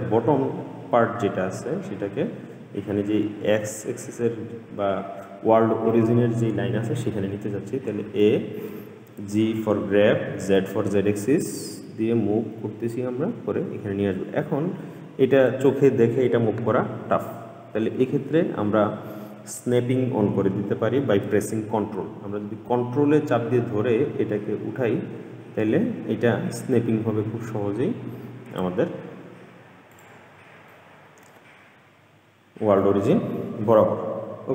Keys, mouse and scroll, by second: 8.3 a, 9.6 g, 30.9-34.1 middle drag.